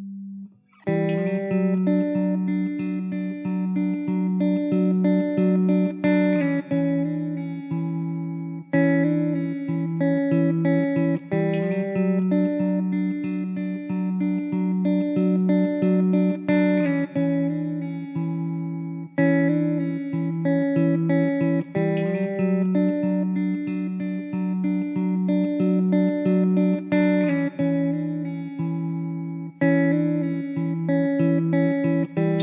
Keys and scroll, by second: 0.3 s, 1.5 Tab, 4.4 shift+a, 11.1 shift+a, 13.9 Tab, 15.0 1, 17.1 Tab, 17.4 s, 19.5 1, 19.8 Tab, 22.6 g, 26.3 g, 27.2 ctrl+z, 30.3 g.